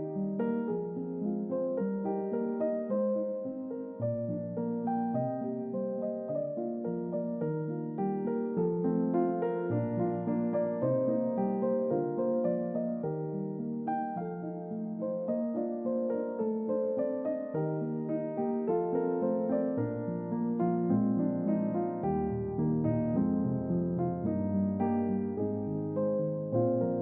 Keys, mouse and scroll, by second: 0.0-0.5 shift+middle drag, 0.9 ctrl+middle click, 1.6-2.5 ctrl+middle drag, 5.2 click, 6.3 click, 7.9-8.6 typing, 11.0 typing, 12.7 typing, 15.5 click, 19.2-20.7 drag, 21.4-22.4 shift+middle drag, 24.6 click, 25.8 click, 26.7 click.